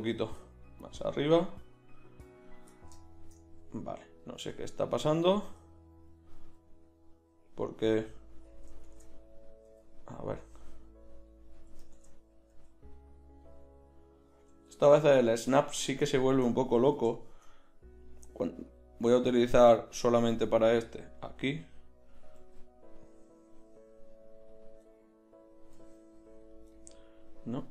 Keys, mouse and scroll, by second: 1.2 g, 2.7 click, 2.9 click, 3.6 g, 6.4 g, 8.1 click, 8.9 shift+Tab, 9.6 g, 11.9 shift+Tab, 12.5 g, 14.5 g, 18.7-21.3 drag, 20.3 g, 22.3 g, 25.8 g.